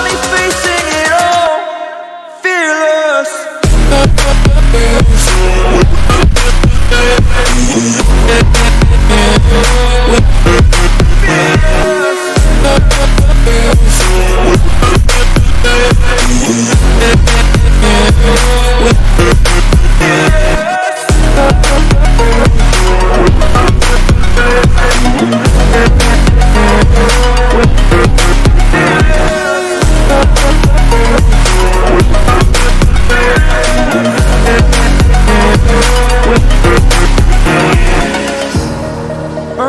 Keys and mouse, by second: 2.5-3.5 drag, 4.1 click, 5.9 click, 8.1-9.1 drag, 12.2-13.2 drag, 15.1-16.1 drag, 17.4 click, 19.4 click, 25.2 ctrl+t, 26.7 click, 30.6 click, 36.3 click.